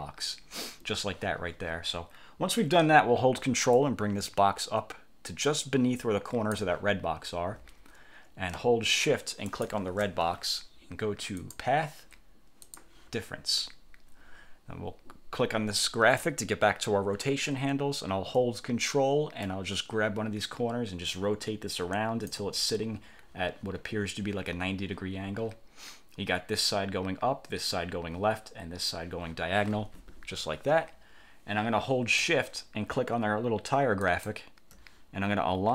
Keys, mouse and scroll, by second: 3.9-6.9 ctrl+drag, 9.6 shift+click, 11.5 click, 12.7 click, 16.3 click, 19.5-22.6 ctrl+drag, 34.1 shift+click.